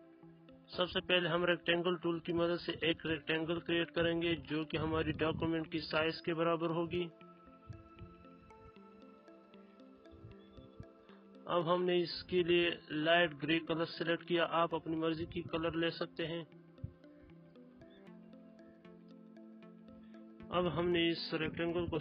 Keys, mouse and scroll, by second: 1.0 right click, 1.0 right click, 1.8-7.9 drag, 14.9 click, 21.8 click.